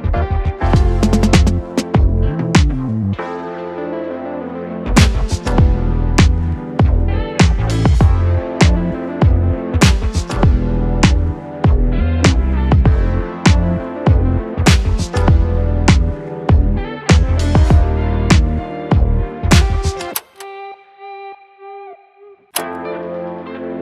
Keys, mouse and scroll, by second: 0.3-3.2 drag, 3.2 Return, 4.3-9.4 typing, 11.1 click, 14.7 shift+click, 17.6 ctrl+space, 18.4-20.2 typing, 22.8 s, 23.4 s, 23.4 BackSpace.